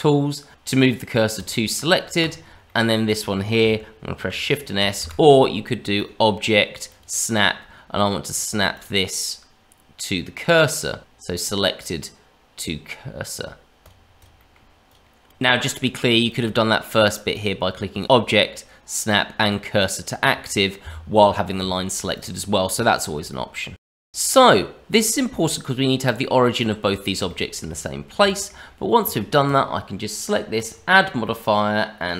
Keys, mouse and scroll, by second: 0.5 ctrl+z, 0.5 shift+s, 2.1 click, 2.6 middle click, 4.1 shift+s, 5.9 click, 8.7 click, 14.2 click, 14.3 middle click, 14.9 click, 15.4 click, 16.2 click, 17.3 click, 18.0 click, 21.7 shift+middle click, 22.1 click, 22.5-23.2 scroll up 2, 23.3 shift+middle click, 24.1 shift+middle click, 24.9 click, 26.0 click, 26.6 click, 27.3 shift+middle click, 27.8-28.1 scroll down 1, 28.2 shift+middle click, 29.0 click, 29.4 click, 31.3 click.